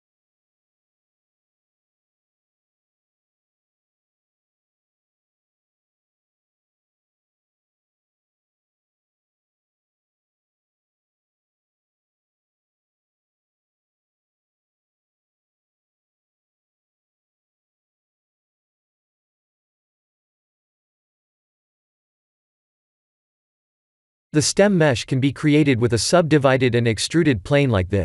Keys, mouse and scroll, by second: 0.3 g, 2.1 click, 2.6 b, 3.3 middle click, 3.9 middle click, 4.3 x, 5.3 middle click, 6.0 KP_1, 7.0 shift+z, 7.5 shift+z, 10.5 click, 10.9 b, 12.8 s, 14.1 g, 16.1-17.1 scroll up 6, 17.3 s, 18.6 g, 20.1 click, 20.5 click, 20.9 middle click, 24.5 KP_1, 25.1 click, 25.6 shift+a.